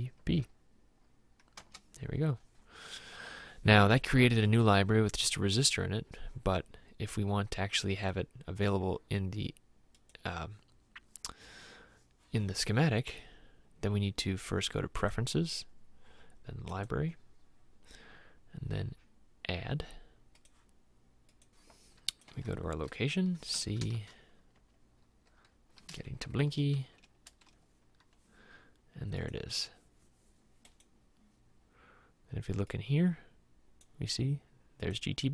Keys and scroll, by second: 1.6 Return, 24.1 shift+;, 24.6 \, 26.3 Down, 26.9 Down, 27.3 Return.